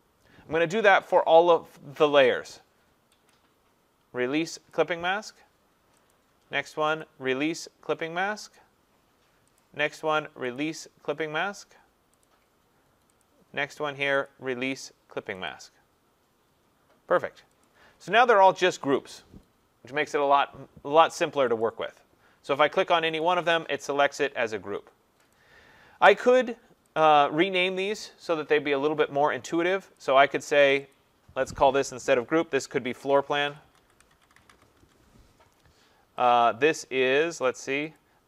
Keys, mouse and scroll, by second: 1.2 click, 3.3 click, 4.7 click, 7.0 click, 8.5 click, 9.6 click, 10.5 click, 12.2 click, 13.2 click, 14.3 click, 15.5 click, 17.7 click, 21.6 click, 23.2 click, 25.3 click, 27.0 click, 30.0 click, 30.7 click, 30.9 click, 32.7-35.0 typing, 36.3 click, 37.4 click, 37.7-38.2 typing, 38.0 click.